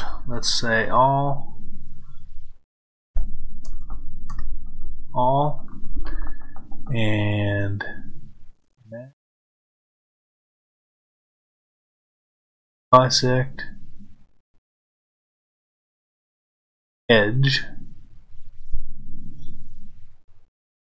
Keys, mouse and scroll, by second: 8.7-20.9 drag.